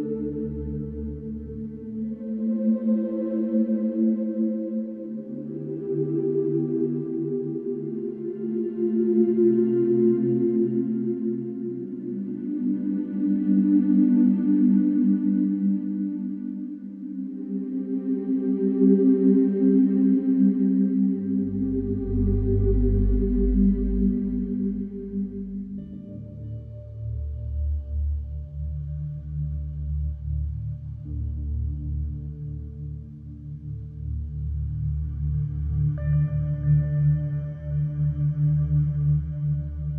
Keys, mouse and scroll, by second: 0.2 click, 2.6 click, 8.2-11.8 drag, 16.2 click, 17.8-21.6 drag, 21.9-25.0 drag, 27.5-30.1 drag.